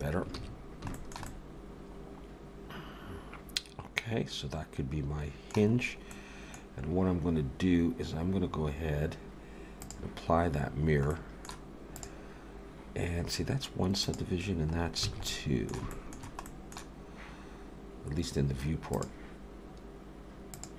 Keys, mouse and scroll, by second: 0.4 ctrl+s, 0.9 shift+middle click, 1.3 middle click, 5.8-6.2 scroll up 2, 6.1 middle click, 6.7-7.2 scroll down 1, 9.8 click, 11.1 middle click, 12.0 click, 14.0 click, 14.8 scroll up 2, 15.0 alt+a, 15.3 middle click, 15.9 shift+middle click, 16.5 middle click, 18.9 click, 20.6 click.